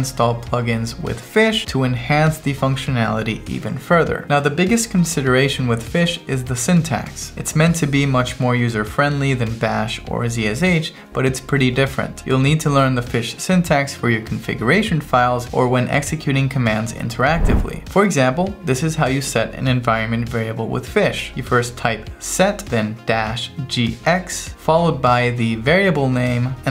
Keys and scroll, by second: 1.4 Return, 2.3 Right, 2.6 Return, 3.7 1.